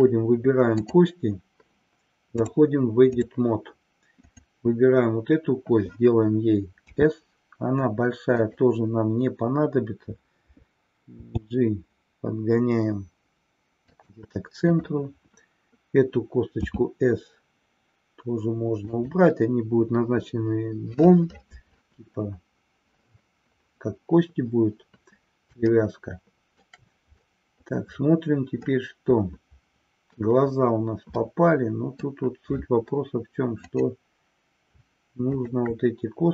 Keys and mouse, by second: 0.8 click, 2.4-3.4 drag, 4.2 click, 14.0 drag, 14.8-15.2 drag, 19.0 click, 25.8-26.9 shift+middle drag, 28.9-30.2 middle drag, 31.2-32.2 middle drag, 33.6 click, 35.2 shift+click.